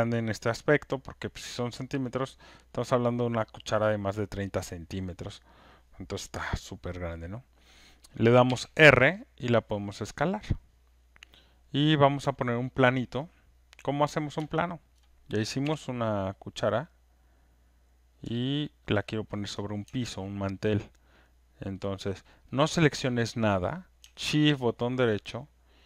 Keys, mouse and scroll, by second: 11.2 click, 12.7 alt+right click, 13.1 alt+middle click, 13.9 alt+click, 14.8 alt+click, 15.6 click, 18.1 click, 18.1 w, 18.7 alt+click, 19.0 alt+right click, 19.3 alt+middle click, 19.5 alt+scroll, 19.5 click, 21.7 shift+right click, 22.5 alt+middle click, 22.6 click.